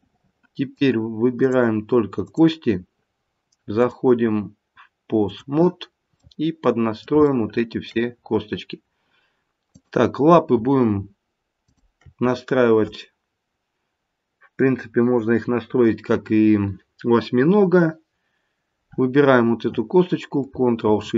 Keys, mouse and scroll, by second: 1.4 click, 2.2 click, 3.7 click, 6.3 middle click, 7.2 shift+middle click, 8.2 shift+middle click, 8.2-8.6 scroll up 3, 8.6-9.7 scroll down 1, 9.7 click, 9.7-10.4 scroll down 1, 11.7 shift+click.